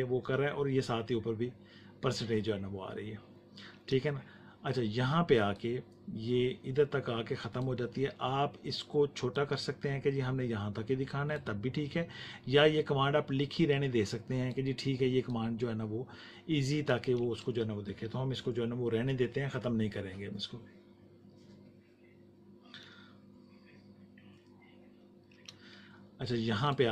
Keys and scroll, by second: 3.6 space, 18.0 space, 25.2 space.